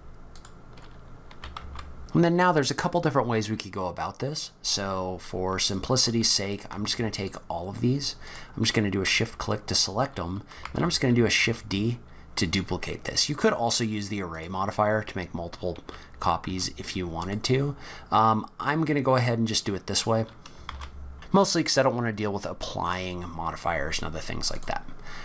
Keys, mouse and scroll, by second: 1.3 g, 5.7 click, 6.9 shift+click, 7.3 shift+click, 8.3 click, 10.7 shift+d, 14.7-15.5 scroll up 6, 15.7 g, 17.6-18.2 scroll down 8, 18.7 scroll up 4, 19.5-20.5 scroll down 1, 20.7 shift+d, 23.7-24.5 scroll down 1, 24.5 click, 25.0-25.2 scroll up 7.